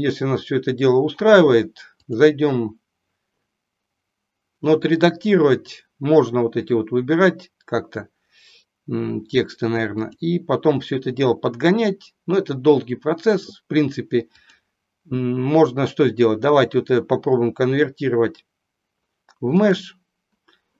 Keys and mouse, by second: 2.0-3.3 drag, 10.0-11.0 drag, 14.5-20.0 drag.